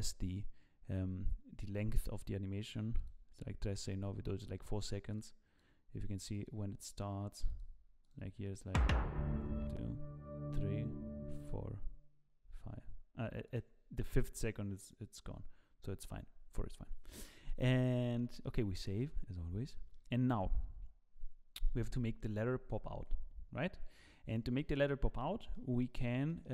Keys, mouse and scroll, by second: 17.6-18.0 scroll down 1, 18.1 shift+middle click, 18.9 ctrl+s, 19.4-19.7 scroll up 2, 19.7 shift+middle click, 24.3 click, 25.5 middle click, 26.0-26.4 scroll up 3, 26.2 middle click.